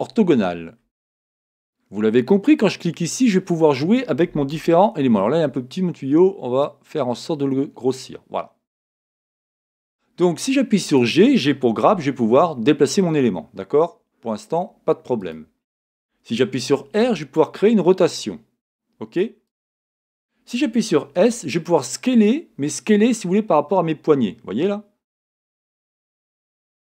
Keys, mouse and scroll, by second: 0.5-1.3 scroll up 2, 1.3-2.5 scroll down 1, 2.5-3.7 drag, 3.7-4.7 scroll down 2, 4.7-6.6 scroll down 1, 6.6 shift+middle click, 6.6-9.5 drag, 9.5-10.9 middle drag, 9.9-10.8 scroll up 2, 10.8 scroll up 1, 10.9 click, 11.9 g, 15.3 click, 17.0 r, 19.6 click, 21.3 s, 26.2 click.